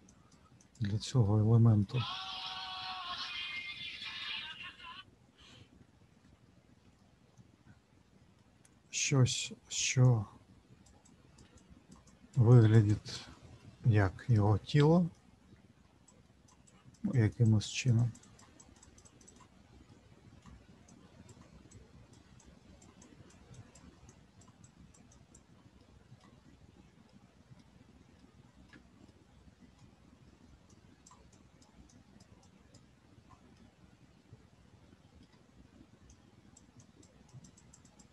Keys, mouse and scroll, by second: 0.6 click, 1.2 middle click, 6.9 middle click, 9.1 middle click, 10.0 shift+click, 11.0 shift+click, 13.5 middle click, 14.4 middle click, 16.0 shift+click, 16.6 shift+click, 17.4-19.0 shift+click, 19.8 middle click, 20.9 click, 21.7 click, 22.8 click, 24.3 click, 25.8 middle click, 26.4-26.8 scroll down 2, 27.1 shift+middle click, 28.1 middle click, 29.0 middle click, 30.7 click, 31.3 click, 33.5 middle click, 36.1 click, 37.0-38.1 click.